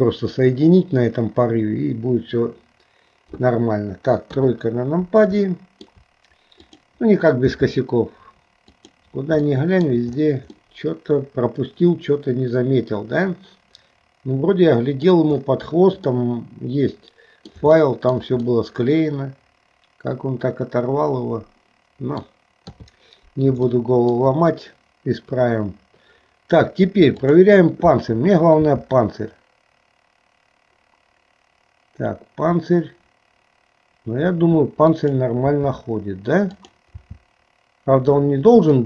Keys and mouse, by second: 4.2 KP_3, 5.7 shift+middle click, 6.7 click, 7.7 g, 9.6 middle click, 10.8-15.2 middle drag, 16.4-17.6 middle drag, 17.9 shift+middle click, 18.6-22.4 middle drag, 22.7 KP_3, 23.8 shift+middle click, 27.3 click, 28.6 r, 35.7 r, 37.2 r.